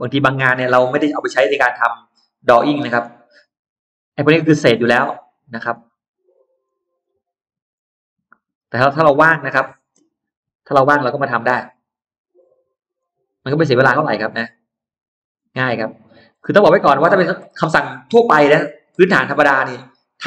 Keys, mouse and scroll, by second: 0.0-0.7 scroll down 1, 0.7-1.0 scroll up 1, 0.7-2.5 middle drag, 2.7 scroll down 1, 3.1 scroll up 1, 5.5 click, 6.5 click, 7.5 click, 8.8 click, 10.3 ctrl+z, 10.7 middle click, 11.7 click, 12.9 click, 13.7 click, 14.9 click, 15.9 click, 16.1-16.5 scroll down 2, 16.6 scroll up 2, 17.2-17.5 scroll down 2, 18.0 click, 18.3-19.6 scroll down 6, 19.7-20.2 middle drag.